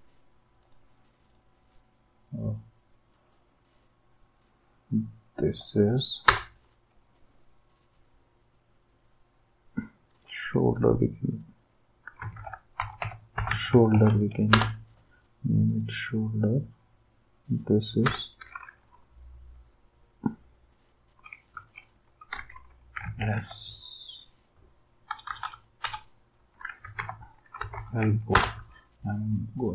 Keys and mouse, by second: 6.2 Return, 11.9-14.4 typing, 14.5 Return, 18.0 Return, 21.6-23.8 typing, 25.1-28.5 typing.